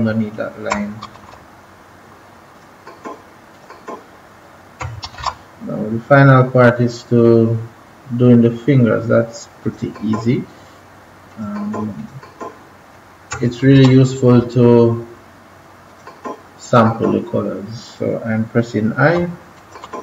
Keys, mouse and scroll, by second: 1.0 ctrl+-, 1.2 ctrl+-, 2.5 click, 5.0 ctrl+=, 5.1 typing, 6.1 scroll down 1, 6.7 scroll up 1, 9.6 click, 13.5 typing, 14.9-15.8 scroll up 1, 15.8 click, 19.0 l, 19.5 click, 19.5 l.